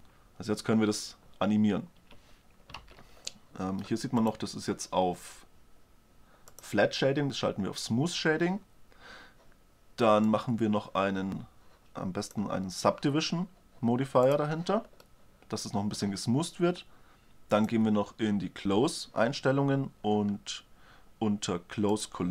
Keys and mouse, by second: 0.4 g, 3.4 alt+a, 4.2 click, 4.7-6.7 drag, 7.1-9.0 drag, 10.8-12.0 drag, 12.0 middle click, 14.8-16.4 drag, 16.4-16.9 middle drag, 16.9 click, 18.2-20.0 drag.